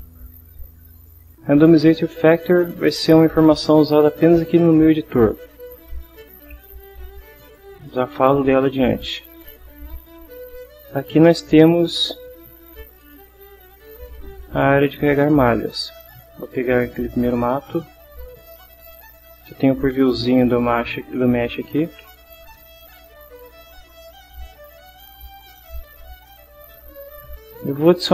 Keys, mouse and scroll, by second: 0.9 click, 13.7 click, 14.7 click, 16.7 click, 23.4 click, 25.3-26.6 drag.